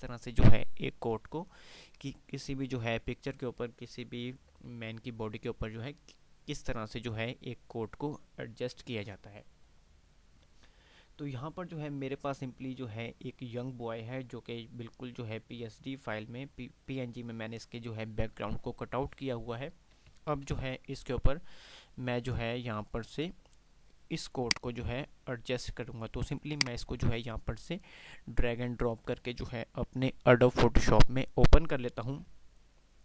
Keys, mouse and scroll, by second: 7.7 typing, 15.7 click, 17.7 click, 20.9 ctrl+d, 21.5-22.3 typing, 22.6 click, 23.5-33.0 drag, 24.2 typing.